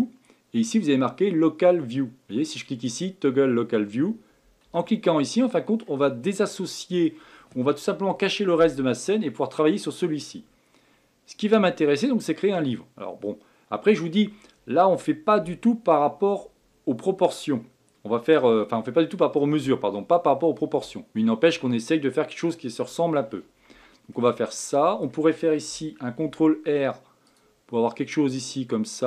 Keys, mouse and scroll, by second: 0.0-2.6 drag, 4.6 KP_Divide, 5.3-6.1 middle drag, 6.1-6.6 scroll down 3, 6.6-9.7 middle drag, 11.4-14.4 middle drag, 23.7 Tab, 24.1-26.2 middle drag, 26.2 ctrl+r.